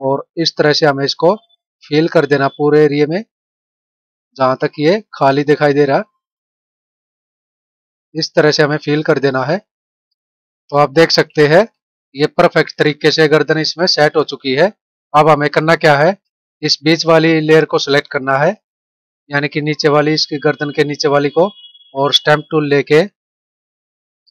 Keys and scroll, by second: 9.7 ctrl+-, 13.5 ctrl+-, 15.0 ctrl+=, 16.1 space.